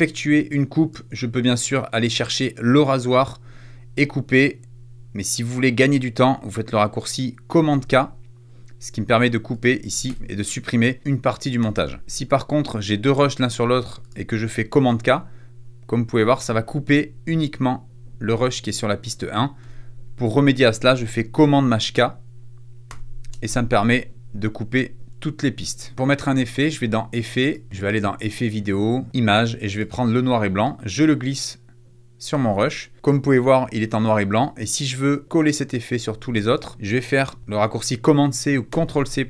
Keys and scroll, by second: 7.6 super+k, 10.0 BackSpace, 11.5 super+z, 14.8 super+k, 19.5 super+z, 22.8 shift+super+k, 38.6 super+c.